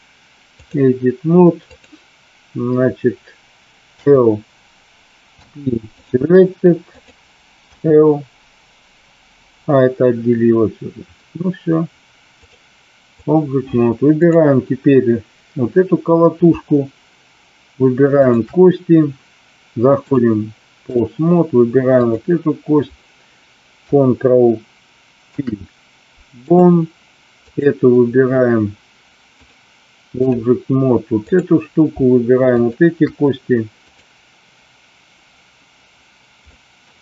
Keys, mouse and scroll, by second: 3.9 l, 5.2 p, 7.0 click, 7.6 p, 12.2-13.2 drag, 14.1 click, 18.1 shift+click, 20.1-21.0 drag, 22.0 click, 25.2 ctrl+p, 29.4 click, 31.3 click, 32.5 shift+click, 36.5-36.9 middle drag.